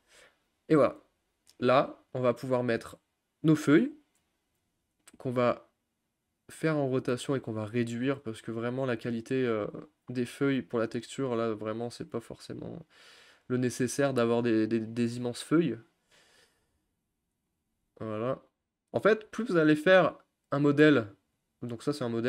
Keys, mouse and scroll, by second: 2.2 click, 2.7 click, 5.1 r, 7.6 s, 12.2 g, 15.0 s, 16.2 click, 16.7 g, 17.7 s, 19.2 g, 21.4 click, 21.8 click.